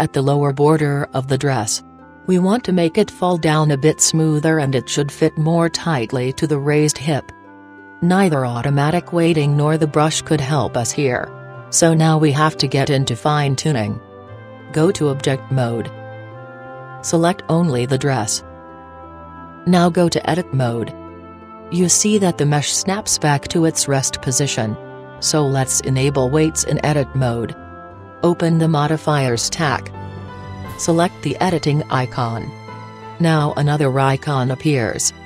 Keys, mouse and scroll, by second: 6.8-8.6 middle drag, 13.5-15.2 middle drag, 15.0-16.9 drag, 17.6-20.4 right drag, 20.6-22.2 drag, 22.4 click, 22.9 middle click, 23.2-23.5 scroll up 1, 23.5-27.4 middle drag, 29.4-31.2 drag, 32.8-34.6 drag.